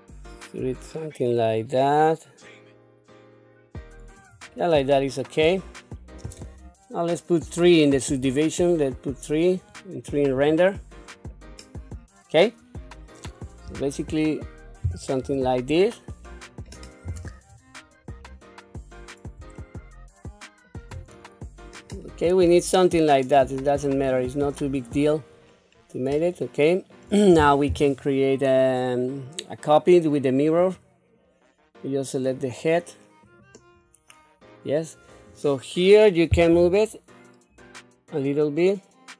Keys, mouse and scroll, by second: 4.5-6.2 middle drag, 8.1 click, 9.5 click, 10.7 middle click, 12.1-12.5 scroll down 1, 13.2-13.7 scroll down 1, 13.7 q, 14.8 q, 15.2 Tab, 16.2 middle click, 17.0 KP_1, 17.4-18.4 scroll up 7, 18.7 scroll down 1, 19.6-20.6 shift+middle drag, 21.6-22.7 scroll down 6, 23.3-24.1 scroll up 4, 24.1-24.8 scroll up 3, 24.8-25.3 scroll down 1, 25.3-25.9 scroll down 3, 26.3 shift+middle click, 28.6-30.8 drag, 32.2 click, 35.5 click, 36.5 g.